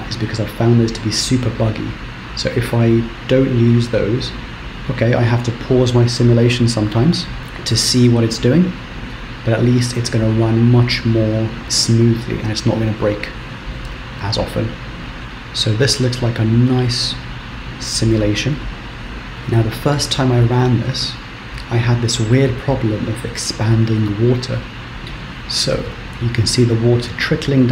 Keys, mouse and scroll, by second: 8.4 Left, 9.1 Right, 9.3 Right, 9.5 Right, 9.6-11.1 Right, 11.3 Right, 15.1 Right, 15.1 shift+Left, 15.2 Right, 15.4 Right, 15.6 Right, 15.8 Right, 17.1 middle click.